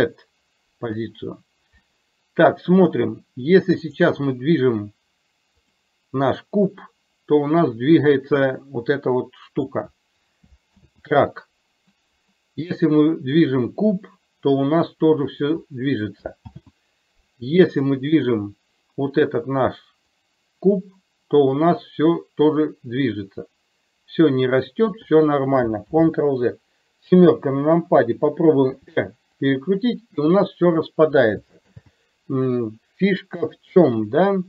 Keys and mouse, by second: 4.0 click, 5.7 click, 6.8-9.8 drag, 10.9 ctrl+z, 12.7 click, 13.5-15.5 drag, 16.6 ctrl+z, 20.3-25.1 drag, 25.9 ctrl+z, 27.2 KP_7, 28.8 r, 31.7 ctrl+z, 33.4 KP_3.